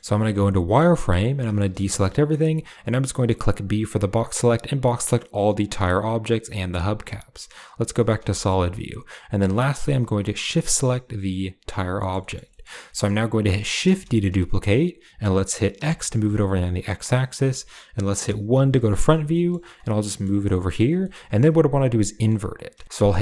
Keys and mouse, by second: 0.1 z, 0.8 click, 0.8 middle click, 1.2 a, 2.2 b, 6.7 z, 8.2 shift+middle click, 10.4 shift+click, 11.6-12.0 drag, 12.1 shift+click, 12.4 click, 12.8 click, 14.1 shift+d, 18.4 KP_1, 19.2 shift+middle drag, 19.9 g, 20.9 shift+middle click, 22.1 shift+middle click.